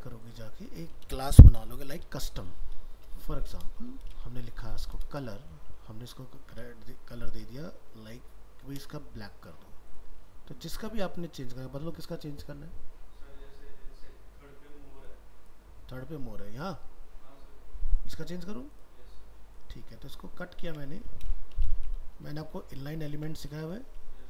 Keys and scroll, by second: 20.7 ctrl+x.